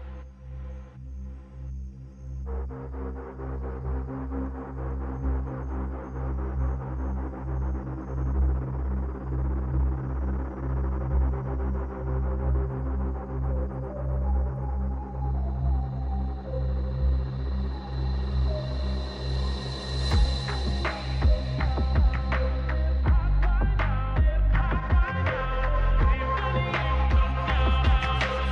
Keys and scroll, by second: 18.9 j.